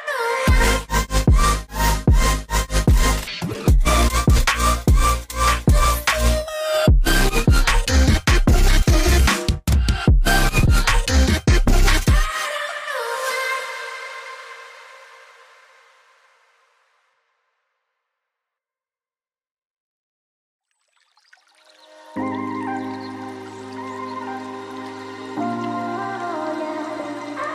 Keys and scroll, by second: 1.0 v, 2.5 ctrl+z, 18.9-19.2 typing, 19.6 Return, 22.3 typing, 22.6 Return.